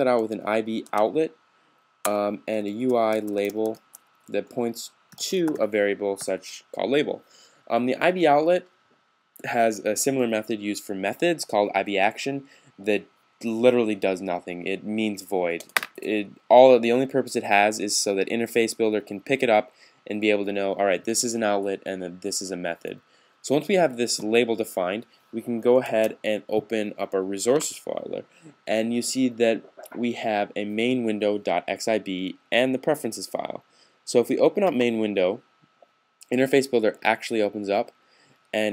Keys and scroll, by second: 0.6 Tab, 2.2-5.9 typing, 8.0-8.8 typing, 25.7 s, 28.0 super+s.